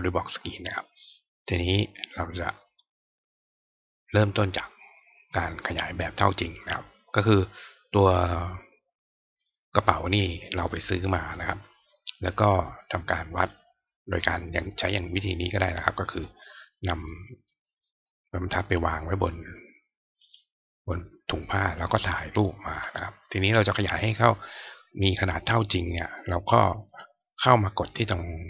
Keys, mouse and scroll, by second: 15.1 click, 16.0 click, 17.5 click, 20.1 right click, 23.4 click, 23.8 click, 26.8 click, 27.1 click.